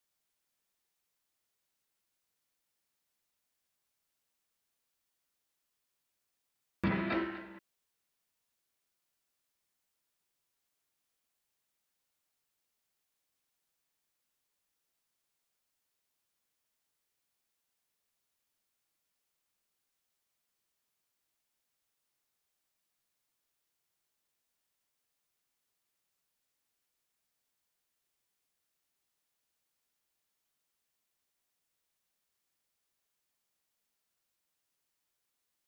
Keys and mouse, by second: 0.7 space, 0.8 click, 1.2 alt+click, 1.6 space, 1.8 click, 1.9 alt+click, 2.4 alt+click, 2.9 click, 2.9 space, 3.2 alt+click, 3.8 click, 4.8 ctrl+z, 5.0 click, 5.6 alt+click, 6.2 space, 6.4 click, 6.5 alt+click, 7.1 space, 7.6-10.1 drag, 10.1 space, 10.3-16.6 drag, 16.6 space, 16.7 ctrl+alt+click, 18.6 ctrl+Return, 20.0 ctrl+alt+click, 20.8 space, 20.9 click, 21.4 ctrl+click, 22.1 space, 22.2 click, 22.6 space, 24.1 click, 24.2 click, 24.4 right click, 25.4 click, 33.4 click.